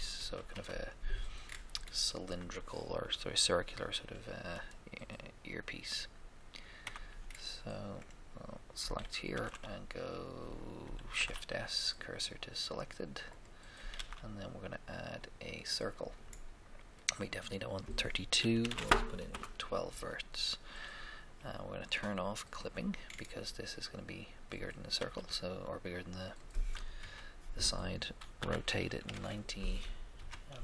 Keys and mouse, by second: 0.1 1, 0.1 KP_1, 0.5 3, 0.5 KP_3, 1.5 middle click, 6.8 Tab, 6.9 Tab, 8.0 right click, 9.3 shift+a, 9.3 shift+a, 11.1 shift+s, 11.3 shift+s, 13.9 shift+a, 16.9 click, 17.3-18.4 drag, 18.5 1, 18.7 2, 19.3 Return, 22.4-24.1 drag, 23.0-24.2 middle drag, 24.3 middle click, 24.9 s, 24.9 s, 27.0 KP_1, 27.0 1, 28.4-30.1 typing.